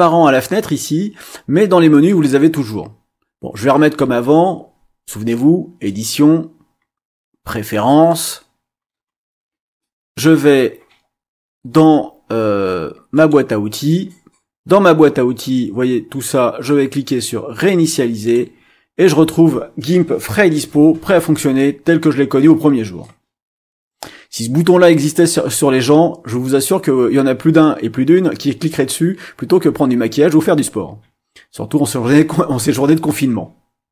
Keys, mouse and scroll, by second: 1.9 click, 5.8 click, 8.1 click, 13.1 click, 18.2 click.